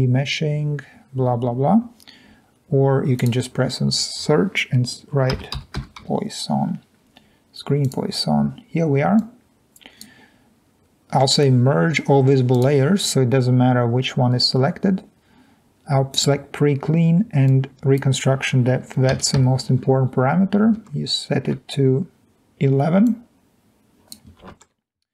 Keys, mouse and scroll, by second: 5.9-7.4 typing, 20.0 1, 20.3 1, 22.2 alt+Tab.